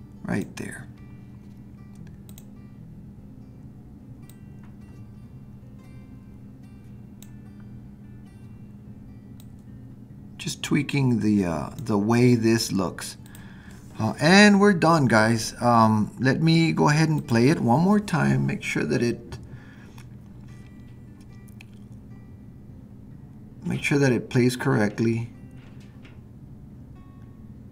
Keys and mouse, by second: 9.4-11.8 drag, 13.3 click, 17.3 click.